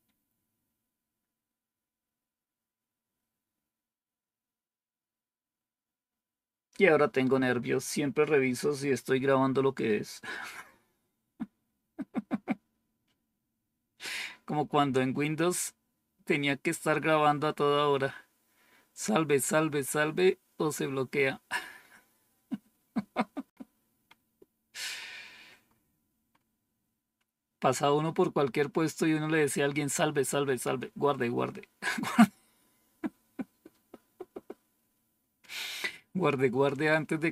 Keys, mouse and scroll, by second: 11.9-13.2 scroll down 4, 15.2-16.0 scroll down 2, 21.2-23.3 scroll down 5, 23.4-23.9 scroll up 2, 23.9-25.4 scroll up 1, 25.4-26.2 scroll up 1, 26.2-28.3 scroll up 1, 28.3-29.4 scroll down 2, 32.2-33.0 scroll down 2.